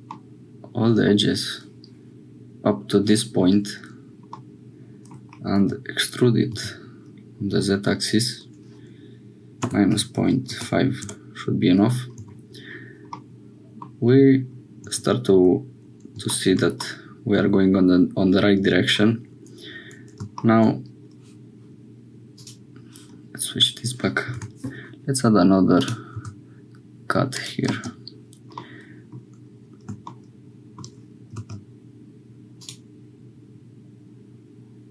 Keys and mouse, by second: 0.1-1.1 middle drag, 4.4 click, 5.7 e, 12.1 Tab, 13.2 click, 14.8 Tab, 16.8-18.5 middle drag, 24.3 k, 28.5 click, 30.0 click, 31.3 ctrl+r.